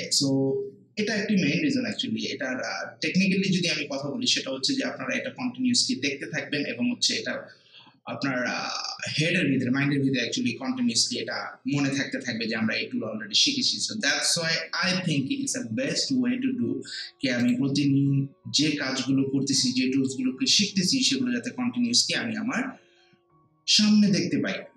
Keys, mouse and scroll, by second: 17.4 click.